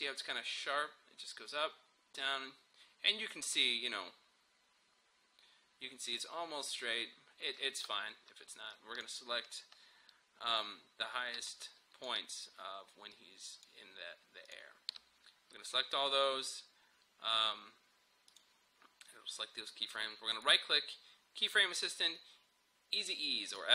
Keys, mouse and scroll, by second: 8.7-14.5 drag, 18.4 click, 20.3 right click, 23.5 click.